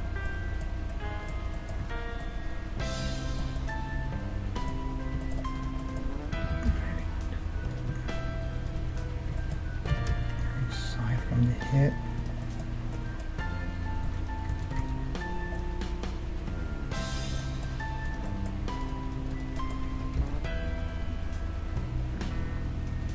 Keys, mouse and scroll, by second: 1.8 Tab, 4.5-7.7 middle drag, 5.5-7.3 right drag, 6.4 g, 8.6 right click, 9.1-11.3 middle drag, 9.5 click, 9.9 g, 12.4-16.2 middle drag, 14.1 Tab, 14.6 Tab, 14.6-16.2 right drag, 14.8 Tab, 16.3-21.5 middle drag, 16.3 right click, 18.2-19.8 drag, 19.8 g.